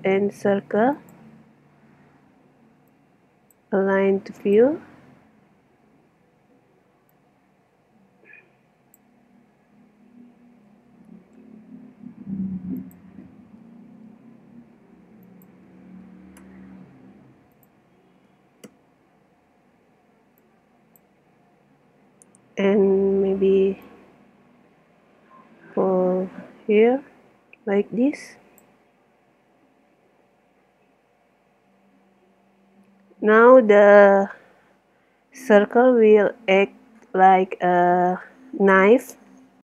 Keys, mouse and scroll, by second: 3.0 click, 5.6 click, 6.1-7.1 middle drag, 7.1 click, 9.8 middle click, 10.7 n, 12.8-14.8 drag, 15.3-17.1 drag, 17.6-19.5 drag, 20.4 click, 21.4 z, 22.2-23.9 middle drag, 22.2-23.9 scroll up 1, 23.9 click, 25.6 click, 25.9-33.8 middle drag.